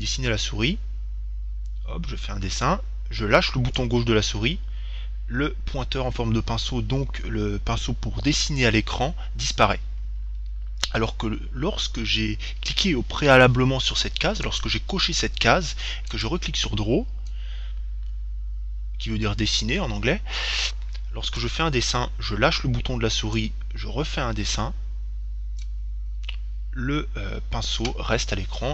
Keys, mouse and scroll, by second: 14.7-18.1 drag.